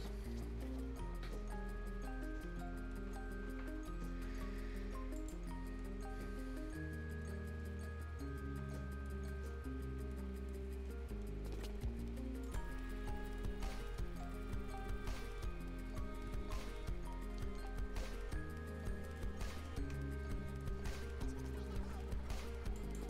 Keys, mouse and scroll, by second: 5.1 click, 12.4 click, 22.7 click.